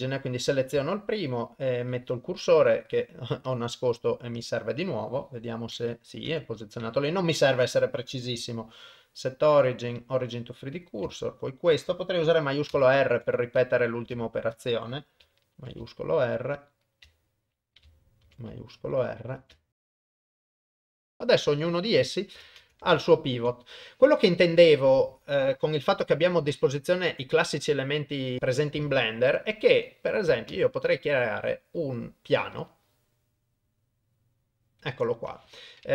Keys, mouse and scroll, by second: 0.9 shift+right click, 2.7-3.1 drag, 3.5-4.7 drag, 5.0 middle click, 6.3 KP_1, 8.5-10.0 right drag, 10.7 click, 11.4 shift+right click, 12.7 shift+r, 13.6 click, 14.3 shift+right click, 15.5 shift+r, 15.9 shift+middle click, 16.6 click, 17.3 shift+right click, 18.2 shift+r, 18.6 shift+middle click, 19.2 click, 19.7 shift+right click, 19.9 shift+r, 19.9 click, 20.3 click, 20.4 shift+right click, 20.7 shift+right click, 20.7 shift+r, 21.0 middle click, 21.2 click, 22.1 middle click, 22.6 ctrl+s, 23.1 ctrl+middle click, 24.8 middle click, 26.1 middle click, 28.8 click, 30.5 shift+a, 34.9 middle click.